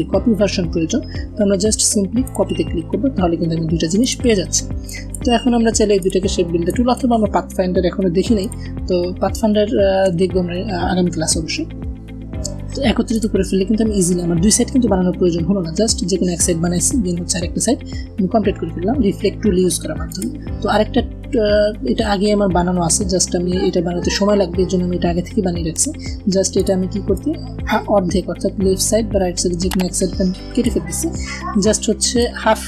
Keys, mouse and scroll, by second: 2.1 click, 2.1 click, 3.3 v, 3.8 click, 7.1-8.6 typing, 8.3 click, 13.0 click, 19.9 click, 26.4-30.8 drag.